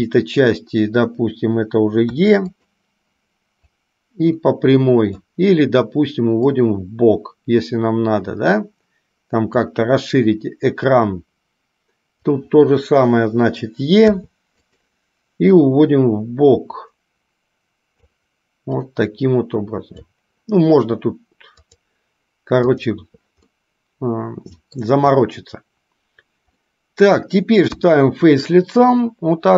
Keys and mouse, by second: 3.9-5.4 drag, 6.6-9.9 drag, 11.0-12.5 drag, 15.6-18.4 drag, 19.1-20.3 drag, 21.8-23.3 drag, 23.6-25.0 middle drag, 26.8 middle click, 27.9 KP_1.